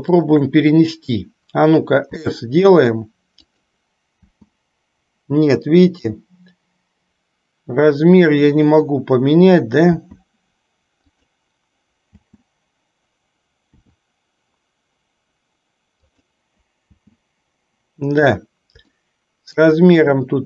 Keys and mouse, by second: 0.3 shift+click, 2.2 s, 4.4 space, 10.1 s, 12.4 space, 13.9 s, 17.0 space, 19.1 shift+middle click.